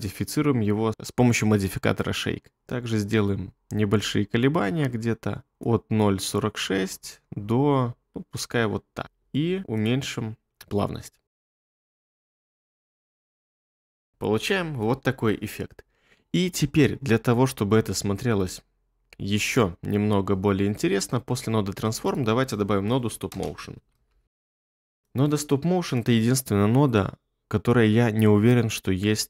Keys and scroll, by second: 9.6 space, 10.3 space, 14.1 space, 23.3-24.8 typing.